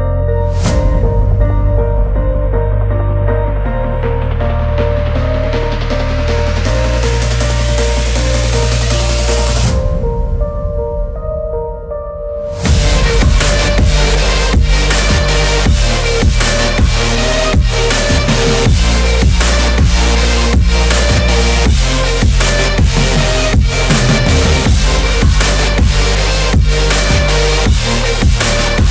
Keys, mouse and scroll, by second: 0.7 click, 2.6 ctrl+s, 7.9 ctrl+e, 9.6-12.6 drag.